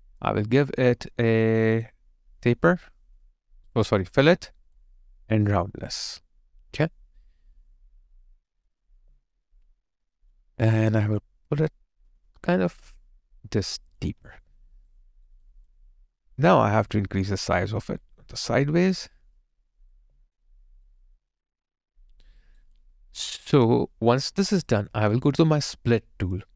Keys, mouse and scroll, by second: 9.0 alt+click, 14.3 alt+click, 14.9 alt+right click, 15.4 alt+click, 19.8 alt+click, 19.9 alt+click, 20.5 alt+right click, 21.0 alt+click, 22.4 alt+right click, 22.8 alt+click, 23.5 alt+right click.